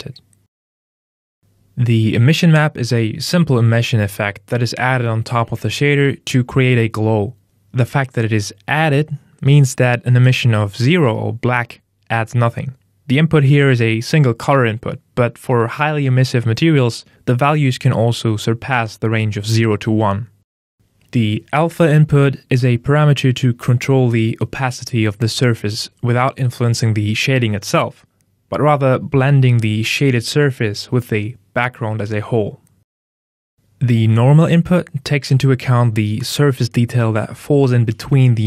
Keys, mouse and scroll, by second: 2.9 click, 14.6 click, 14.7 click, 20.1 click, 22.9 click, 33.5 click, 36.3 click, 37.1 click.